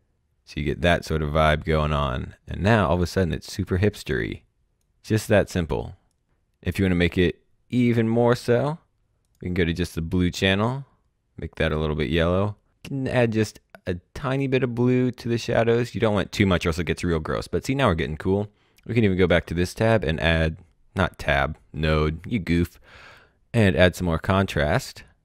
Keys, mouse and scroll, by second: 4.7 click, 8.3 click, 14.1 click, 19.1 click, 23.5-25.2 drag.